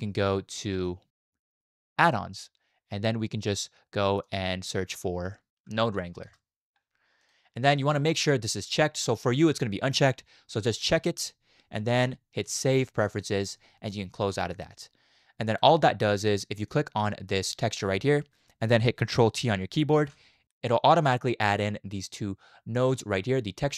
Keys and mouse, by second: 15.5 click, 16.7-18.1 drag, 20.0 ctrl+t, 20.8-23.7 drag.